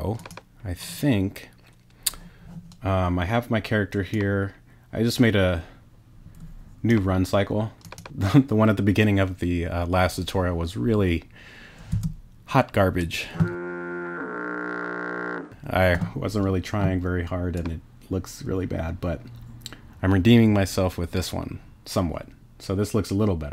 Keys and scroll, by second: 12.0 space.